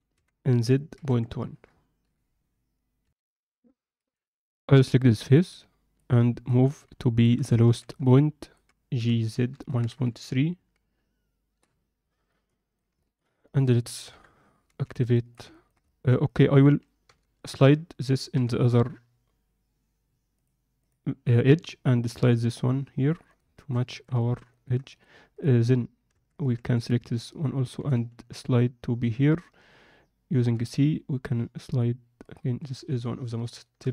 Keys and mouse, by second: 3.0 ctrl+F10, 3.0 KP_7, 5.3 alt+middle click, 6.4 middle click, 7.0 alt+shift+middle click, 7.6 a, 7.9 alt+middle click, 8.9 g, 12.3 alt+middle click, 13.0 alt+shift+middle click, 14.0 KP_7, 14.6 z, 15.1 alt+shift+middle click, 15.5 ctrl+alt+middle click, 15.8 alt+shift+middle click, 16.2 click, 17.0 g, 20.8-22.2 drag, 22.2 g, 23.6 shift+middle click, 23.8 ctrl+middle click, 24.2 alt+shift+middle click, 24.4 ctrl+middle click, 24.9 click, 26.1 Tab, 26.5 Tab, 27.7 g, 32.6 Tab, 33.6 alt+shift+middle drag.